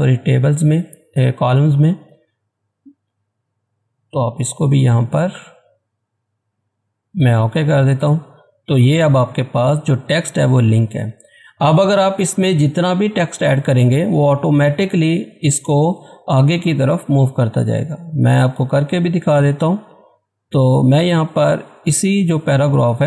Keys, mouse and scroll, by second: 5.1 click, 7.3 click, 18.9 click, 19.7 scroll up 1, 20.3-23.0 drag.